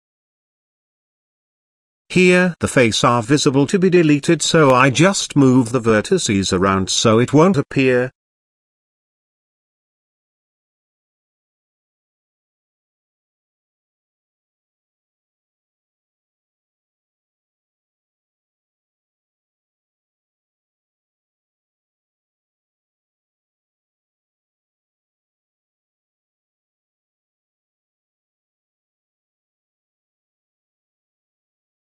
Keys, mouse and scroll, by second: 0.0 middle click, 1.1 middle click, 1.7 shift+middle click, 2.5 click, 3.0 x, 3.4-5.1 middle drag, 5.2 ctrl+z, 5.6 middle click, 6.2 shift+middle click, 6.8 middle click, 7.2 shift+middle click, 8.0 middle click, 8.6 shift+middle click, 9.4 middle click, 10.9 click, 12.7-13.5 drag, 14.2 click, 15.0 g, 18.1 g, 19.8 middle click, 20.7 shift+middle click, 21.7 click, 22.3 shift+click, 23.1 g, 27.2 shift+middle click, 27.9 click, 28.8 shift+click, 30.0 shift+click, 30.5 shift+click.